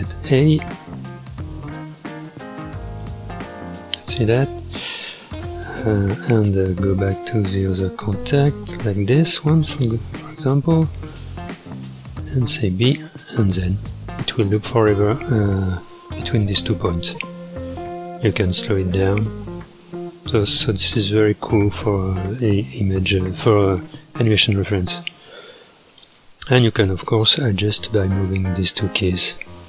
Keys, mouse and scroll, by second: 6.5 space, 7.7 space, 9.1 Left, 12.8 click, 13.5 space, 18.0-21.1 drag, 24.9-26.6 drag, 26.6 space, 27.8 g.